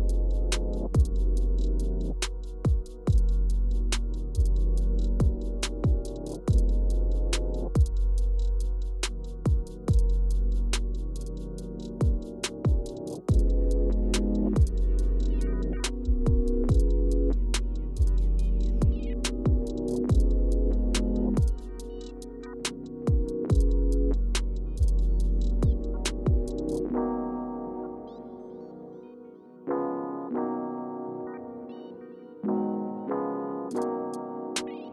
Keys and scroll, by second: 3.3 o, 6.2 Escape, 8.3-10.8 typing, 8.6 Return, 13.8-15.4 typing, 17.7-18.3 scroll down 5, 31.1 Return.